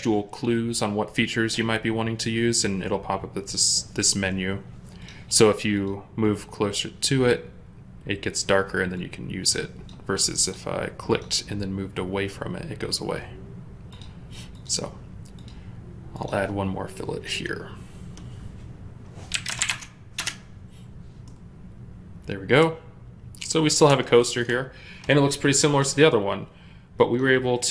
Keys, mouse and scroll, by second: 19.2 typing, 19.6 Return, 20.0 Return, 21.1 middle click.